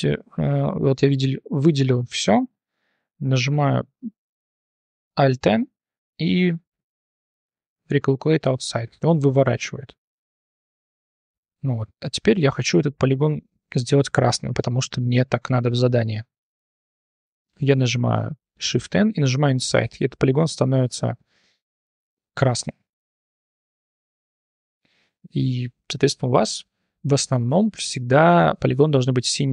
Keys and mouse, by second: 0.5 a, 3.8 alt+n, 9.2 click, 9.6 click, 10.3 3, 10.6-11.1 drag, 10.8 middle click, 12.8 click, 13.3 click, 13.3 middle click, 18.5 shift+n, 20.6-20.9 drag, 21.2 3, 21.6-22.1 drag, 22.2-22.6 drag, 23.2 drag, 24.4 click, 24.8 shift+click, 25.2 click, 25.6 drag, 26.1 drag, 26.7 drag, 27.2-27.6 drag, 28.5 click, 28.7 3, 28.9 click, 29.3 drag.